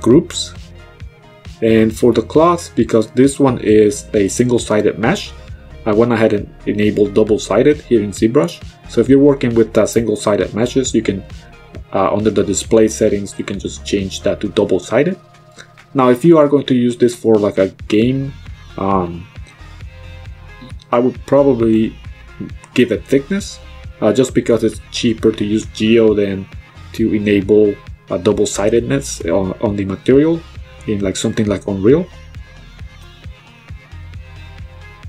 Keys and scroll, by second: 32.5 b, 32.9 t.